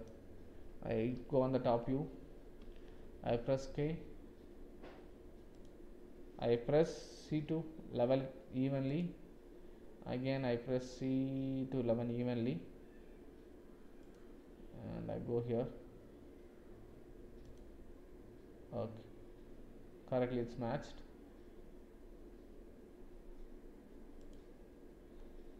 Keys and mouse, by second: 1.1 KP_7, 3.2 k.